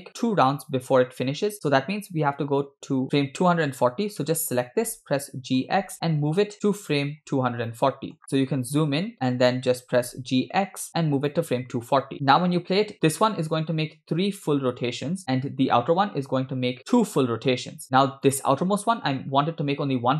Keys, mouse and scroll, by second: 5.3 g, 7.4 scroll up 2, 7.7 shift+middle click, 8.3-8.9 scroll up 5, 8.9-9.2 scroll down 3, 9.1 ctrl+middle click, 9.8 g, 12.1-12.4 scroll down 9, 12.2 space, 18.0 space, 18.3 click.